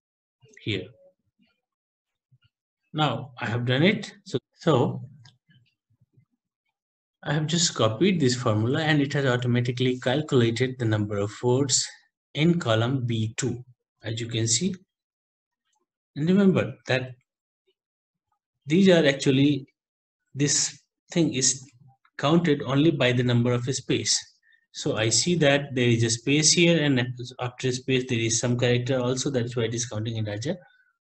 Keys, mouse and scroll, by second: 0.0 Right, 0.4 ctrl+v, 3.5 Left, 4.3 Right, 7.7 Right, 13.4 Left, 14.8 Left, 14.8 F2, 16.2 ctrl+Right, 16.4 ctrl+Right, 17.7 Left, 18.0 Home, 19.5 Right, 19.8 Home, 20.4 Left, 21.0 End, 25.0 Left, 25.4 ctrl+Right, 25.6 ctrl+Right, 26.0 ctrl+Right, 26.2 ctrl+Right, 28.1 Right, 28.4 End.